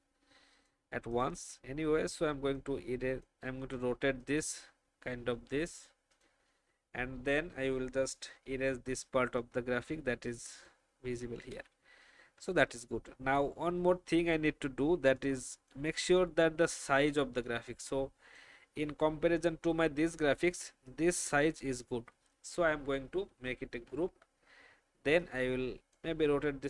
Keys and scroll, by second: 8.1 alt+shift+m, 11.5 v, 17.2 space, 23.8 ctrl+g.